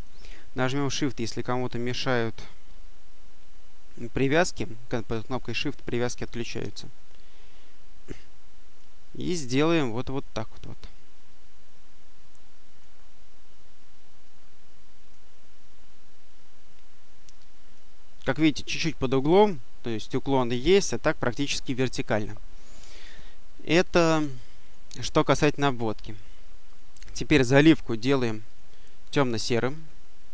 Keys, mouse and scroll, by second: 9.9-13.1 drag, 13.9-15.4 drag, 16.1-18.1 drag, 23.8 click, 24.5 click, 26.5 click, 28.3 click, 29.6 click.